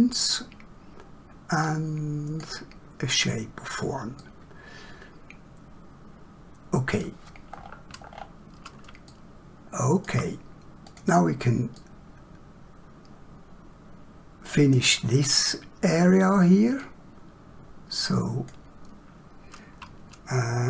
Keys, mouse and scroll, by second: 4.2 middle click, 7.5 middle click, 7.7 scroll down 1, 9.1 shift+middle click, 10.8 click, 11.7 middle click, 16.8 click.